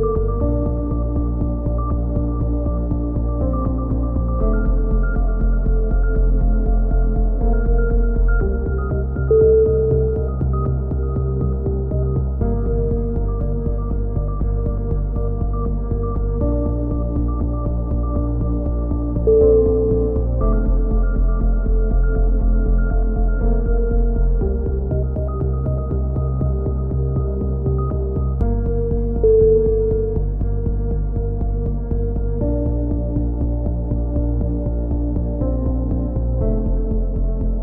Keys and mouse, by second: 0.0-0.4 typing, 0.4 middle click, 1.9 z, 2.8 ctrl+r, 4.0 z, 4.1-5.2 middle drag, 4.4 z, 5.2-6.5 right drag, 5.9 z, 8.8 click, 9.9-10.9 right drag, 10.4-11.4 drag, 12.6-14.0 right drag, 14.0 middle click, 14.3 click, 15.2 z, 15.4 z, 16.8 right click, 17.4 click, 17.4 z, 18.2 z, 23.4 click, 24.9 click, 26.1-27.1 right drag, 26.7 click, 27.1 click, 29.1 ctrl+z, 29.9 right click, 30.4 click, 35.7 a, 35.9 z, 36.5 z, 37.2 right click.